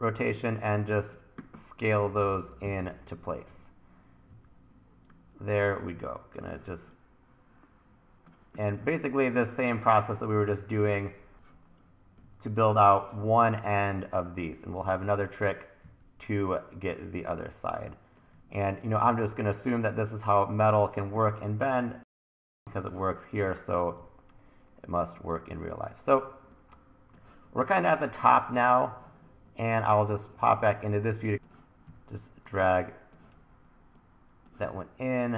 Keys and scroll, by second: 2.7-4.3 typing, 6.6 t, 8.3-9.2 typing, 11.3 w, 15.8 w, 18.4 1, 19.1 t, 23.4 w, 24.0 e, 30.2 BackSpace, 31.8 e, 33.3 super+z.